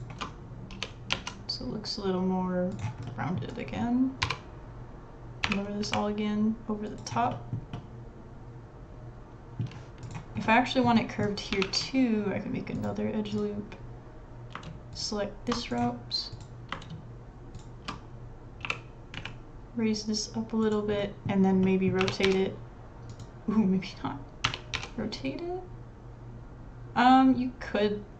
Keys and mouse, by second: 0.7 r, 1.6 click, 4.2 l, 5.4 g, 7.3 middle click, 7.7-9.7 middle drag, 10.0 click, 10.4 middle click, 11.0 middle click, 11.6 ctrl+r, 17.7 alt+shift+click, 18.6 g, 21.0 middle click, 22.0 r, 24.4 r.